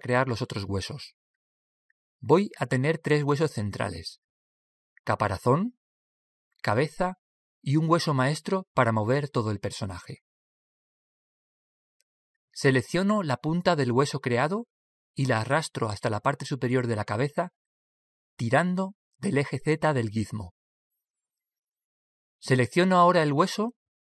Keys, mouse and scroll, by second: 1.6 Tab, 18.9 click.